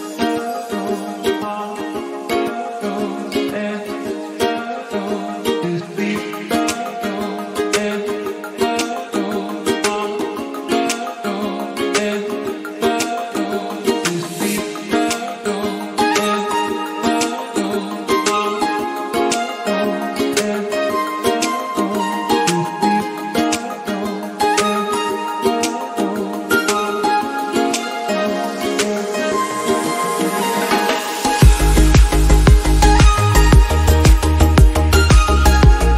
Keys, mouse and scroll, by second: 0.2 scroll up 3, 0.4 click, 0.8 KP_7, 1.5 scroll up 1, 1.6 g, 2.2 click, 2.3 g, 7.3 click, 7.8 shift+middle click, 8.2 shift+d, 8.8 r, 10.2 middle click, 10.6-11.0 scroll down 2, 11.3 click, 11.6 shift+click, 12.1 m, 14.6 click, 15.7 click, 17.1-18.3 drag, 19.1 click, 19.5 KP_0, 19.6 KP_0, 20.3 g, 21.8-22.7 scroll down 13, 22.2 click, 22.7-26.1 drag, 26.1 ctrl+z, 26.4-27.5 scroll up 4, 26.6 shift+middle click, 29.2 click, 29.7 scroll down 1, 30.0 click, 30.5-31.6 scroll up 5, 31.6 scroll up 1, 31.7-32.8 middle drag, 32.3-33.8 drag, 35.1-35.8 scroll down 5, 35.8 click.